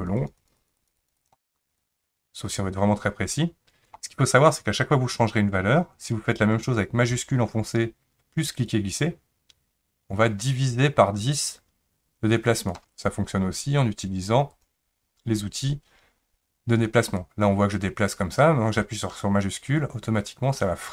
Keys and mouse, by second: 0.0 click, 0.2 click, 0.4 click, 0.6 click, 0.8 click, 1.0 click, 1.8-4.0 drag, 8.8-12.8 shift+drag, 14.5 click, 17.3-18.8 drag, 18.8-20.9 shift+middle drag.